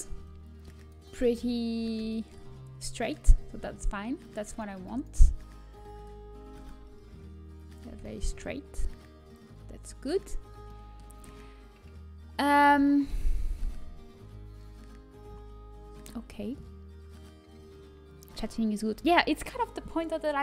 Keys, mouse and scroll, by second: 0.4 click, 1.1-2.4 right drag, 2.4-4.3 middle drag, 6.6-11.8 right drag, 13.0-13.3 scroll up 1, 14.4-15.0 scroll down 1, 15.0-17.2 scroll up 1, 17.2-18.4 middle drag.